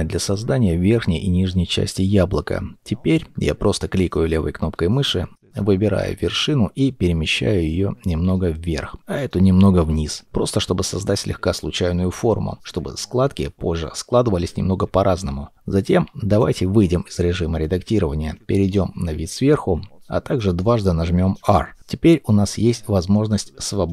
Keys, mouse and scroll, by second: 0.8-1.5 scroll up 1, 6.0-6.6 scroll down 1, 7.7 g, 8.7 g, 10.0 g, 11.2 g, 13.0 g, 14.1 g, 15.8 Tab, 17.8 KP_7, 18.3 scroll, 18.4-20.7 scroll down 1, 21.1 r.